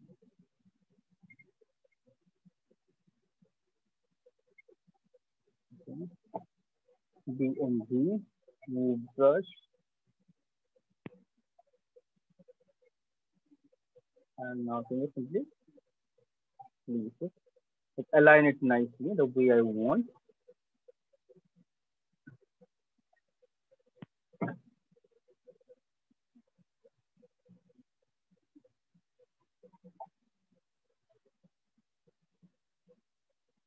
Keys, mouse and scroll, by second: 0.0 click, 1.2 click, 2.2 click, 4.6 click, 5.4 alt+click, 6.7-7.9 typing, 8.4-10.9 right click, 9.7-10.8 scroll, 10.8 b, 11.0 click, 11.6-13.0 click, 12.2 click, 12.3 click, 12.9 click, 14.2 click, 14.9 click, 15.7-18.6 drag, 20.8 click, 22.4 right click, 23.6 right click, 24.2 click, 27.1-27.6 click, 28.0 click, 28.5 click, 28.6 click, 28.8 click, 29.4 click, 29.8 click, 30.1 click, 30.9 click, 32.9 click, 33.3 click.